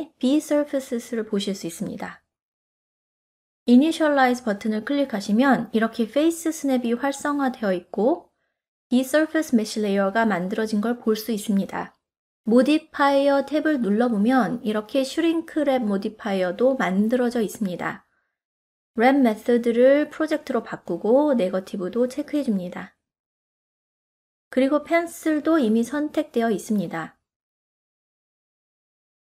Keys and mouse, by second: 0.3 click, 3.5 click, 18.6-20.4 drag, 21.6 click, 23.1 ctrl+middle click, 27.6-29.2 middle drag.